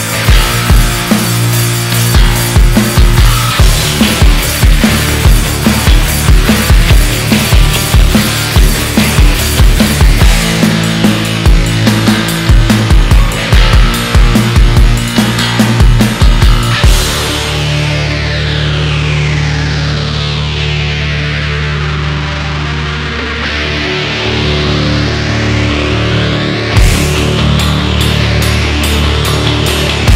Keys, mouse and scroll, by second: 1.7 alt+z, 2.2 click, 2.8 alt+z, 3.3 click, 5.0 click, 7.5 Tab, 8.1 scroll down 2, 8.3 alt+z, 8.9 scroll up 1, 9.4-11.1 middle drag, 11.1 KP_1, 11.7-12.2 shift+middle drag, 12.2-12.7 scroll down 1, 12.7 scroll down 1, 13.0-14.8 middle drag, 14.8-15.1 scroll up 1, 15.1 KP_1, 15.9-16.3 shift+middle drag, 16.3-16.8 scroll up 2, 16.8-17.6 shift+middle drag, 17.6-18.3 scroll up 2, 18.3-20.8 shift+middle drag, 20.8 Tab, 21.2-22.8 shift+middle drag, 22.8 ctrl+r, 26.8 KP_1, 27.6-28.7 middle drag, 28.7 Tab, 28.9-29.2 scroll down 2, 29.2 KP_1, 29.9-30.1 shift+middle drag.